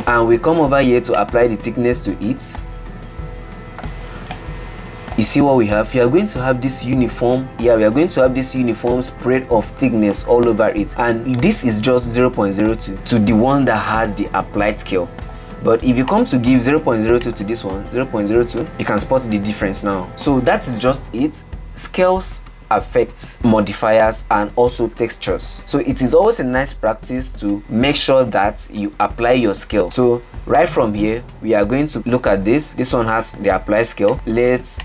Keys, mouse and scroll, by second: 1.3-4.5 drag, 4.6-5.6 middle drag, 5.6-7.2 scroll up 3, 7.4-8.2 middle drag, 15.0-15.9 middle drag, 15.9-16.3 scroll down 3, 16.3 click, 17.4-19.9 drag, 19.9-20.7 middle drag, 20.7-22.1 scroll up 3, 22.1-23.4 shift+middle drag, 30.2 shift+scroll up 1, 30.2-31.8 shift+middle drag, 31.8 click, 32.5-33.6 middle drag.